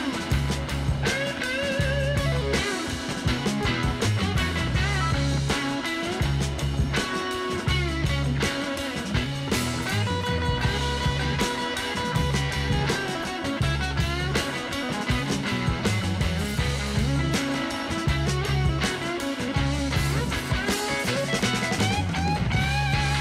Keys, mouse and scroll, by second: 8.7 click, 10.1 click, 11.9 click, 14.2 click, 20.6 l.